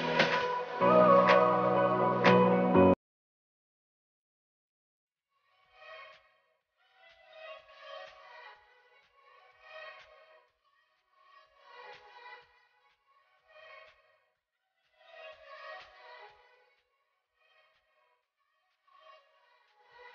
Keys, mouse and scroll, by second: 2.1-2.9 scroll down 1, 2.9 click, 7.9 s, 8.4-9.7 scroll down 1, 9.7-16.5 drag, 17.9 Right, 18.5 click, 18.8 Right.